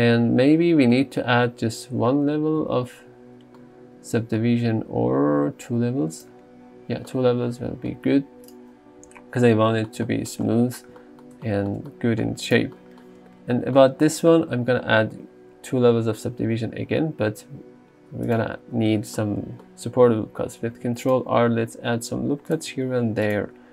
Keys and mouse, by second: 2.4 ctrl+1, 6.2 click, 15.8 ctrl+2, 19.0 Tab, 20.7 ctrl+r, 21.2 click, 22.5 click, 23.1 ctrl+r, 23.3 click.